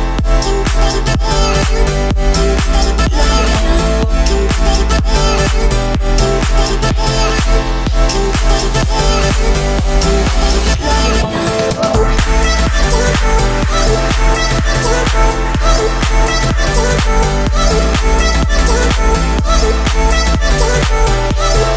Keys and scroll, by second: 3.0 Escape, 7.2 Escape.